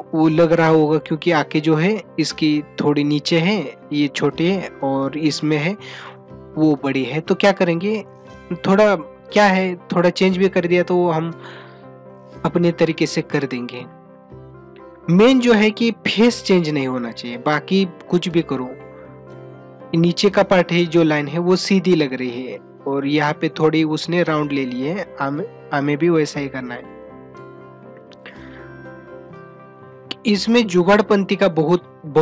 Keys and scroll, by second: 14.2 ctrl+-, 16.5 ].